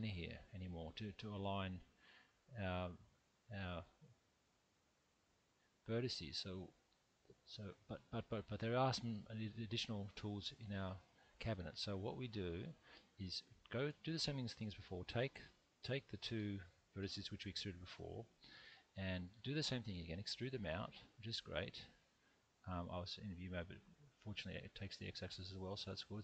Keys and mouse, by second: 2.9-4.2 middle drag, 7.0-9.6 middle drag, 19.3 e, 19.6 x, 20.9 click, 22.9 click, 24.7-26.2 middle drag.